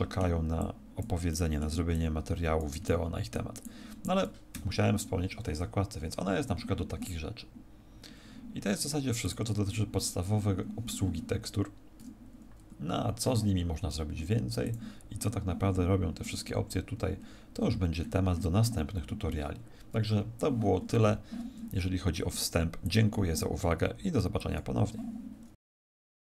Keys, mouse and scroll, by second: 0.7 click, 1.4 middle click, 2.0 click, 2.9 middle click, 3.8 click, 4.6 Escape, 9.2 click, 14.7 click, 16.0-16.6 scroll down 2, 16.6-17.6 scroll down 20, 17.6-18.0 scroll down 1, 18.3-19.0 scroll up 19, 21.0 Escape, 22.3 click.